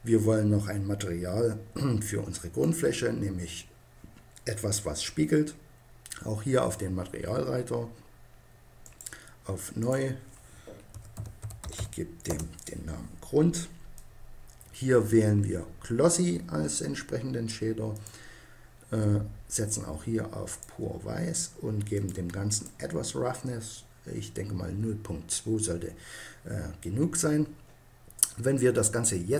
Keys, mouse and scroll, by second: 2.6-4.5 right drag, 8.8-11.4 right drag, 13.9-15.6 right drag, 17.9-19.6 drag, 21.9-24.2 drag.